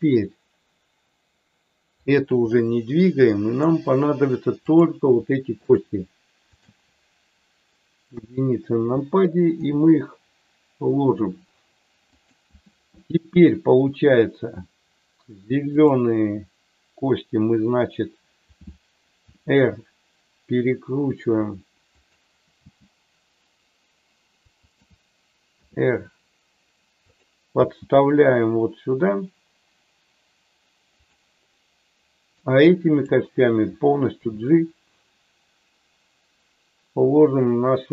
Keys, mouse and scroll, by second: 2.0 click, 2.5-3.5 middle drag, 4.6 click, 5.7 shift+click, 6.4 shift+click, 8.1 KP_1, 9.5 r, 15.8 click, 19.3 r, 22.0 click, 22.5 g, 24.6 click, 25.5 r, 27.0 click, 27.6 g, 31.0 click, 32.4 click, 34.2 g.